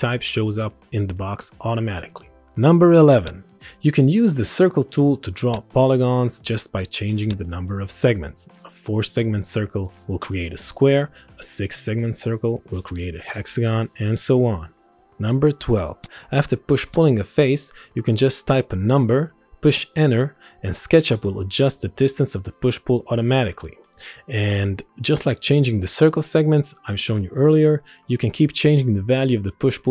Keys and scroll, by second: 1.1 KP_5, 1.4 KP_2, 1.8 Return, 9.4 4, 9.9 s, 10.4 Return, 13.0 6, 13.3 s, 13.4 Return, 19.3 KP_1, 19.9 KP_0, 21.7 Return, 24.8 KP_2, 25.3 KP_4, 26.0 KP_0, 26.6 Return, 28.4 KP_3, 28.8 KP_6, 29.4 KP_0.